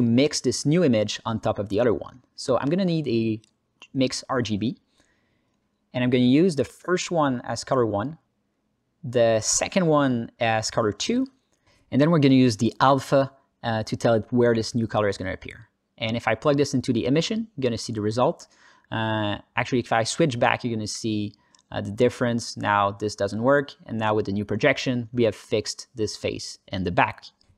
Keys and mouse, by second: 0.0 Tab, 0.5 ctrl+alt+middle click, 0.8 alt+middle click, 1.3 click, 1.8 click, 2.7 shift+a, 6.6 click, 7.5-8.8 drag, 9.1 click, 9.7 ctrl+alt+middle click, 10.7-12.1 drag, 13.6-15.8 drag, 16.5-17.3 drag, 18.5 alt+shift+z, 22.3-23.1 drag, 23.8-24.4 drag, 26.2 Tab.